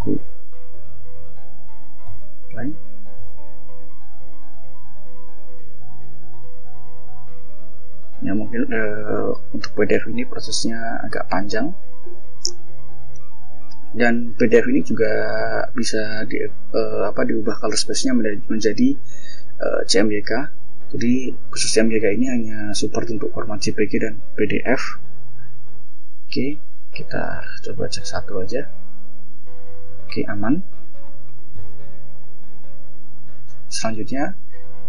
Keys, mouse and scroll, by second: 0.0-0.2 typing, 1.6 click, 5.4 click, 26.2 click, 29.6-30.8 scroll down 6, 30.8-31.5 scroll up 2, 31.5 scroll up 1, 32.4 click, 33.5 click, 34.7 click.